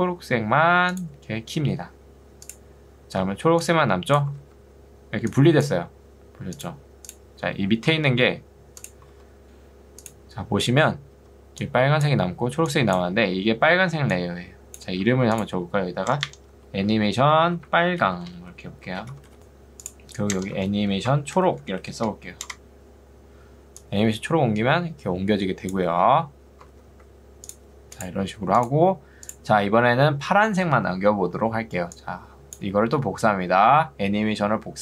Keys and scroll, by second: 3.3 ctrl+2, 4.5 ctrl+z, 8.1 ctrl+2, 9.4 Escape, 11.2 ctrl+2, 15.0 Escape, 16.2 Return, 16.6 Right, 17.4-19.0 typing, 20.4 Return, 20.6 Right, 21.2-22.1 typing, 22.6 Return, 26.2 ctrl+z, 31.3 2, 32.9 Escape.